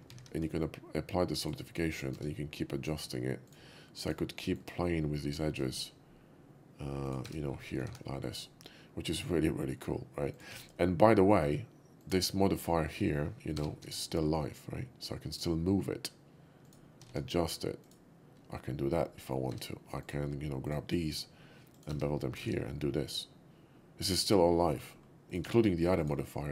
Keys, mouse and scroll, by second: 0.2 ctrl+`, 1.3 click, 1.8 right click, 2.1 Tab, 2.7 click, 3.5 shift+click, 4.1 shift+click, 4.5 shift+middle click, 5.3 shift+click, 5.7 ctrl+b, 7.1 click, 7.2 Tab, 8.3 Tab, 8.3-9.8 middle drag, 8.3 shift+2, 10.3 click, 10.5 q, 11.9 click, 12.6 click, 12.9 q, 13.9 g, 13.9 z, 15.2 z, 16.7 click, 17.0 s, 17.8 click, 17.8 s, 19.1 middle drag, 19.5 Tab, 19.9 click, 20.6 shift+click, 21.0 ctrl+b, 21.8 click, 21.9 Tab, 22.7-24.7 middle drag, 22.7 shift+2, 25.0 middle click, 25.3 click, 26.0 click.